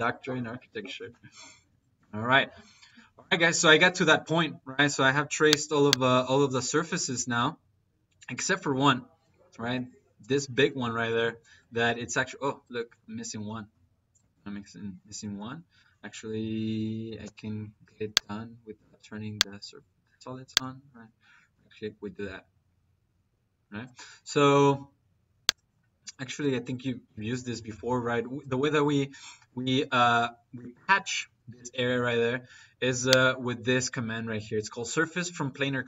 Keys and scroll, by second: 17.0 -.